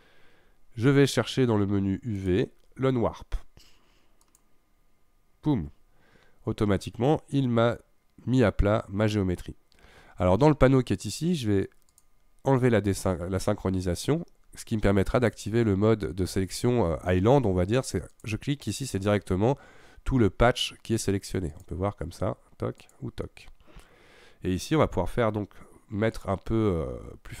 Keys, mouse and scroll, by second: 2.2-5.2 drag, 6.7-8.9 scroll down 3, 11.9 click, 15.2 click, 18.1 click, 21.5 click, 22.8 click, 26.1 click.